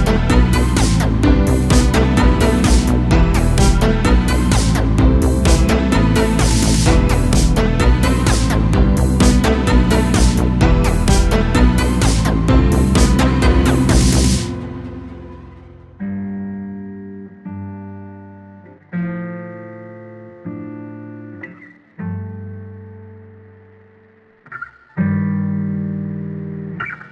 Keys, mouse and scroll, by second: 4.7 a, 5.2 click, 6.1-6.7 drag, 6.7-8.5 scroll up 10, 8.5 click, 16.4-18.0 middle drag, 18.0-20.2 drag, 20.2 a, 20.4 a, 20.8 click, 21.7-22.7 drag, 22.9 click, 26.5-27.1 drag.